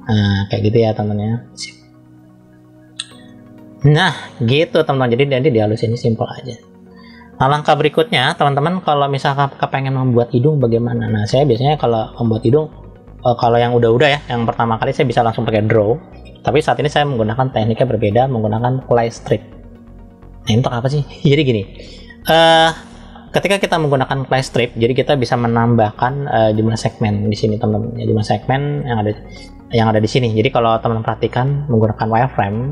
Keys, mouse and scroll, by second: 0.5 click, 2.8 scroll down 1, 3.1 middle click, 3.7 click, 5.3 middle click, 6.2 click, 7.9-8.3 scroll up 2, 8.9-10.3 middle drag, 10.5 scroll down 1, 11.7 shift+middle click, 12.6-13.7 middle drag, 14.0 shift+middle click, 15.6 click, 19.9 click, 26.3-27.0 scroll up 1, 27.4-27.9 scroll down 1, 27.9 middle click, 31.2-32.7 drag.